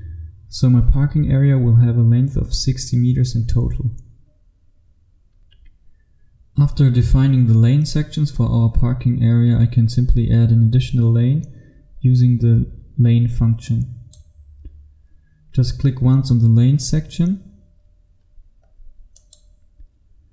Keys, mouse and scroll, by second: 1.7 click, 5.4 F2, 6.8 F3, 13.8 click, 18.2-19.2 scroll up 1, 19.2 click.